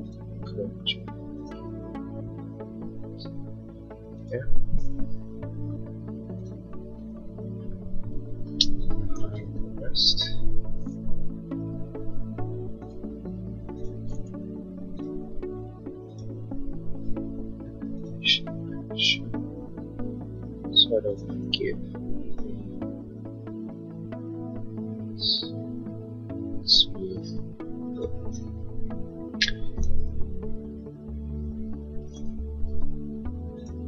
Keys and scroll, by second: 5.4 l, 7.5 Escape, 8.7 space, 11.6 l, 14.7 Escape, 21.9 Escape, 29.8 Escape, 33.1 p.